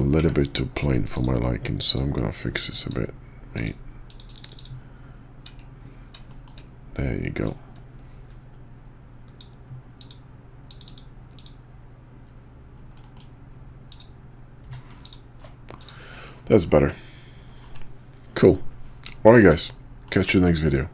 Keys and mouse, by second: 0.1 d, 1.9-2.9 drag, 6.3 shift+click, 7.4-9.4 drag, 13.0 middle click, 13.9 click, 14.6 q, 15.8 click, 16.1 KP_5, 16.4 middle click, 16.9-17.6 middle drag, 19.2 shift+middle click, 19.7-20.1 middle drag, 20.6 shift+click.